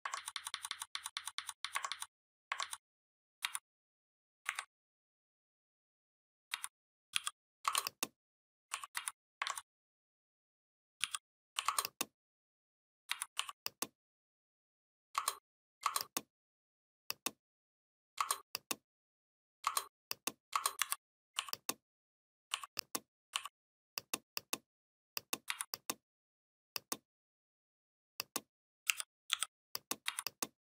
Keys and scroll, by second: 0.0 ctrl+z, 1.7 ctrl+z, 2.5 ctrl+z, 3.2 v, 4.3 Delete, 6.4 v, 7.0 l, 8.8 v, 9.3 ctrl+z, 10.8 l, 12.9 v, 20.6 shift+m, 25.3 v, 28.7 u, 29.1 i, 29.9 v.